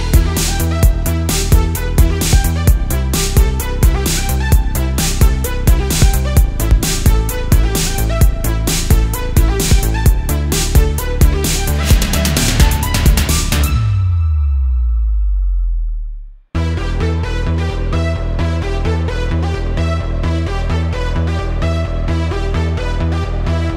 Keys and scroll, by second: 0.5 super+z, 0.7 alt+super+space, 0.9 alt+super+space, 1.5-4.3 typing, 5.6 super+space, 6.3 space, 7.0 super+z, 7.9 super+z, 8.3 alt+super+space, 9.5 super+s, 11.1 space, 12.5 space, 13.0 super+z, 15.4 super+z, 17.0 space, 22.0 space, 23.4 space.